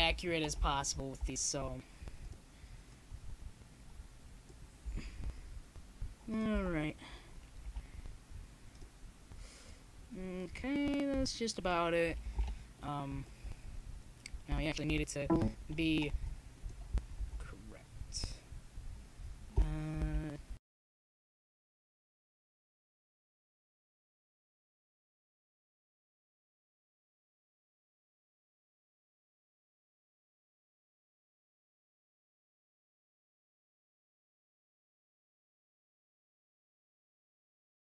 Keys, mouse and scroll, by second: 0.9 z, 1.6 click, 1.7 middle click, 3.9-5.0 middle drag, 5.8 click, 6.5-8.5 right drag, 8.5 click, 8.7-10.2 middle drag, 10.2 click, 10.3 middle click, 11.4-13.5 right drag, 12.1-14.0 drag, 14.8-16.7 right drag, 15.8-17.6 drag, 17.6 middle click, 19.6 a, 20.4 click, 20.7 z, 23.1 z, 23.8 middle click, 25.4 x, 26.9 z, 28.9 shift+d, 32.6-35.4 right drag, 34.1-35.9 drag.